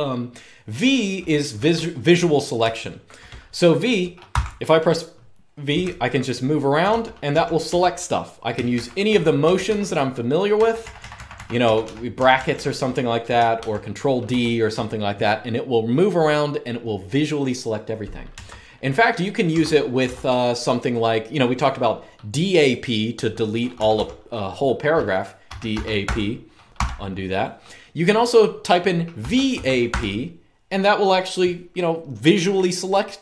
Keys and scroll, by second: 1.3 typing, 2.3-2.8 typing, 4.0 typing, 5.5-7.4 typing, 8.4-14.5 typing, 18.2 Escape, 19.3 Escape, 19.8 j, 23.5 typing, 25.0-26.5 typing, 28.7-30.1 typing.